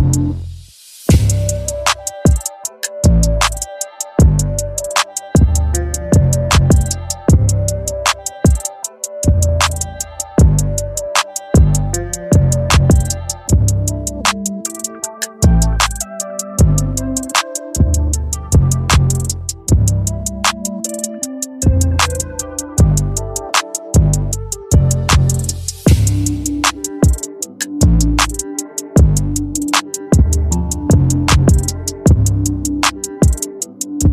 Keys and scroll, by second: 8.8 Return, 21.6 Return, 31.8 [.